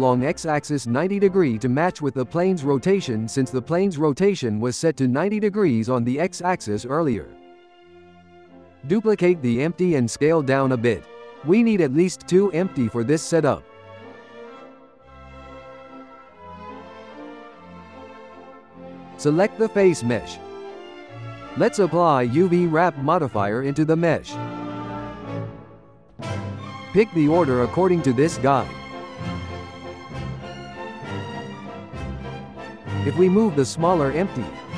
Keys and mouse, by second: 2.0 click, 2.9-5.1 shift+middle drag, 5.1 click, 7.0-8.7 shift+middle drag, 8.7 shift+d, 10.6 s, 13.3 ctrl+a, 15.9 F2, 16.7 BackSpace, 16.9 BackSpace, 19.0 n, 19.1 click, 19.7 click, 22.7-25.2 drag, 27.5 click, 31.0 click, 34.3 click.